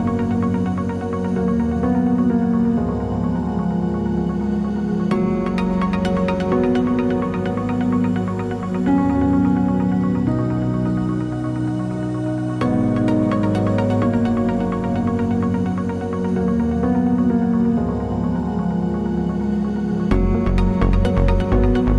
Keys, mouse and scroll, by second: 2.0-4.5 drag, 11.7 click, 12.9 click, 13.8 drag, 14.9-19.4 drag, 20.1-21.9 drag.